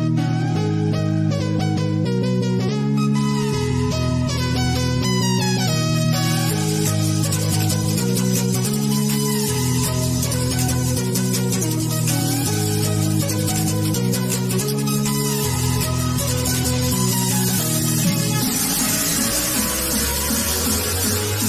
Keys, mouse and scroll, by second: 3.5 click, 10.6 click, 17.5 click, 18.2-21.4 middle drag.